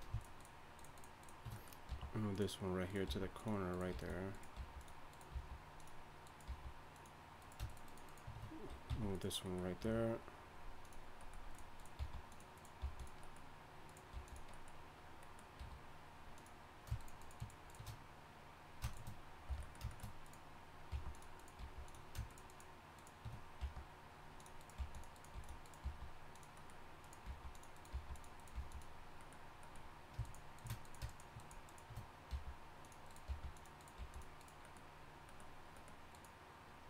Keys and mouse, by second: 1.9 g, 3.1 g, 3.9 g, 4.6 g, 5.3 g, 6.5 g, 8.9 f, 9.8 g, 12.0 g, 12.8 g, 14.1 g, 15.6 g, 19.5 f, 20.9 g, 21.6 g, 23.6 g, 24.8 g, 25.3 g, 25.8 g, 27.3 g, 27.9 g, 28.5 g, 32.3 g, 33.3 g, 34.0 g.